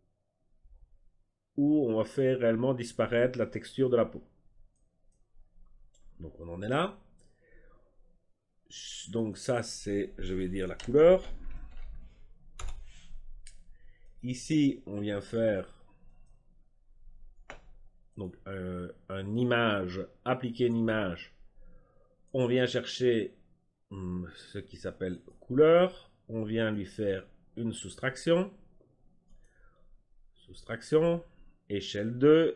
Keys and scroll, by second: 10.4-12.1 typing, 12.5 Return.